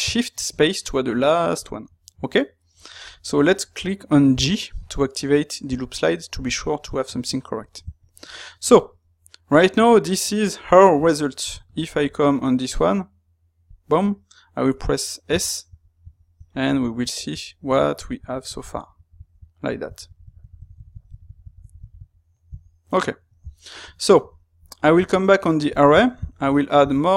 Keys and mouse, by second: 23.9-27.1 ctrl+middle drag.